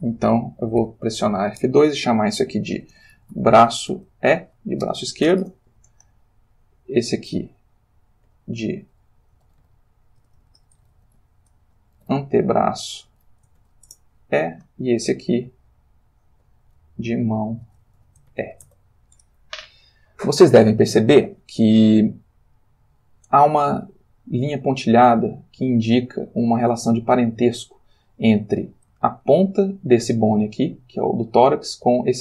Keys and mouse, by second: 0.8 F2, 2.9-5.3 typing, 5.4 Return, 6.6 click, 8.3 F2, 9.3-13.6 typing, 13.8 Return, 15.1 click, 16.3 F2, 17.6 shift+m, 17.8 shift+a, 17.9 shift+o, 18.3 shift+e, 18.6 shift+Return, 22.6 click, 23.8 ctrl+middle click, 27.8 ctrl+middle click, 29.1-30.2 ctrl+middle drag, 30.6 click, 32.1 click.